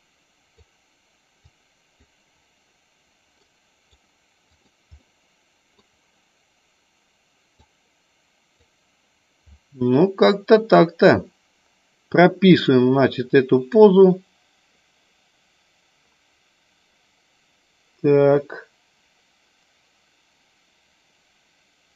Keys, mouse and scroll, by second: 1.3 click, 3.3-4.7 right drag, 4.9 middle click, 7.6-8.7 drag, 12.6 click, 13.8-21.9 drag.